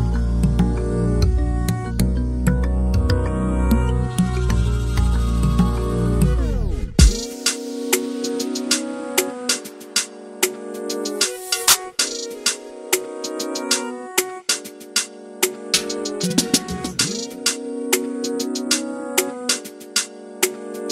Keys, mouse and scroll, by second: 1.8 click, 4.2 click, 5.6 click, 7.5 click, 10.0 r, 13.2 s, 14.1 click, 17.8 r.